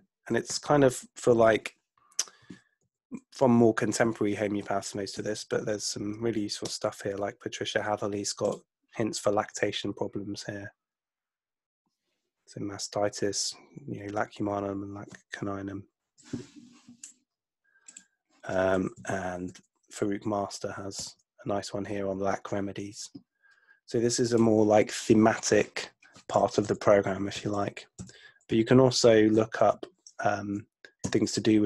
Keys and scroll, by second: 0.5 Right, 2.9 Right, 4.6 Right, 5.3 Left, 6.7 Return, 19.0 Right, 20.9 Return, 26.7 Right, 27.4 Right, 28.3 Right, 29.4 Right, 31.1 Return.